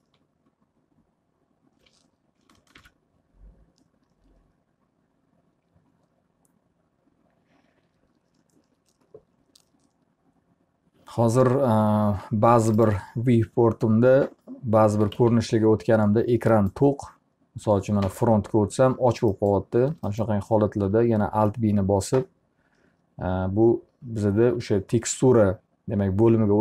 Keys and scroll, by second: 2.4 alt+b, 14.6 t, 15.2 z, 18.0 f, 21.4 alt+b.